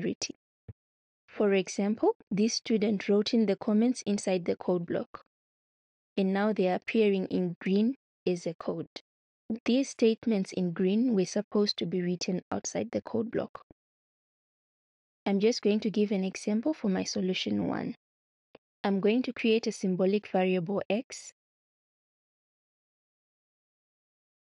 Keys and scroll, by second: 21.2-22.3 typing.